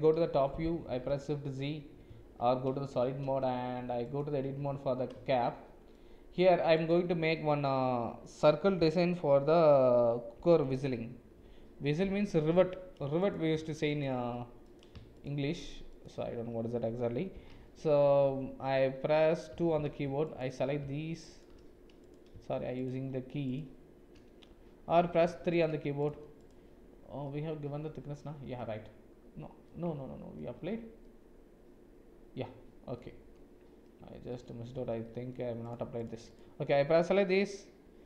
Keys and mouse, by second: 0.1 KP_7, 0.9 shift+z, 2.1 z, 3.4 Tab, 3.8 Tab, 4.5 Tab, 5.4 shift+click, 14.7 click, 15.1 shift+click, 15.6 shift+click, 16.0 shift+click, 20.2 alt+click, 22.7 shift+click, 23.5 shift+click, 25.5 click, 26.4 click, 27.2-28.5 middle drag, 29.6 middle click, 30.7 Tab, 31.0-32.9 middle drag, 33.9 Tab, 34.3 middle click, 35.0 shift+middle click.